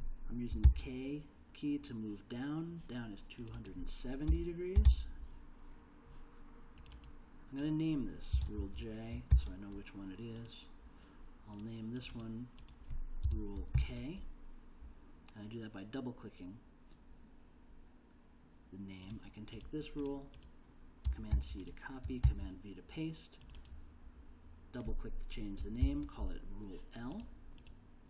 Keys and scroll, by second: 0.6 shift+k, 4.0-5.3 typing, 8.3 space, 9.3 shift+j, 13.2 space, 13.7 shift+k, 21.3 super+c, 22.2 super+v, 25.8 shift+l.